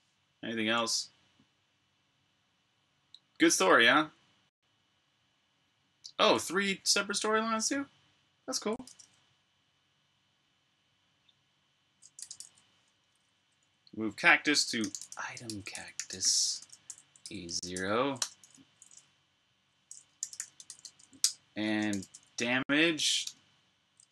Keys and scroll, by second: 0.6 ↺, 11.9-12.8 typing, 13.7 Tab, 14.5-18.7 typing, 19.8-21.2 typing, 22.2-23.0 typing, 23.1 Tab.